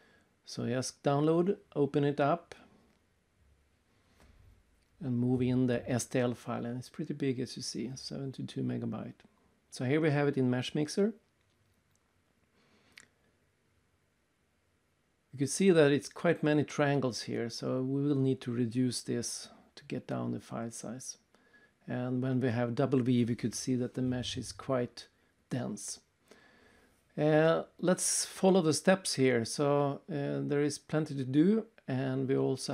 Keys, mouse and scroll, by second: 0.3 click, 1.1 double click, 5.9 click, 8.1 click, 10.6 click, 10.9 right click, 11.4 right click, 12.2-12.8 scroll up 1, 12.8 right click, 12.8 scroll up 1, 16.0 right click, 17.4-18.0 scroll up 1, 19.1 w, 21.1 right click, 21.6-22.4 scroll down 1, 22.4 scroll down 1, 23.5 alt+Tab, 23.7 click, 24.6-25.0 scroll down 2, 30.7 alt+Tab, 31.7 scroll up 3, 32.1 scroll down 3.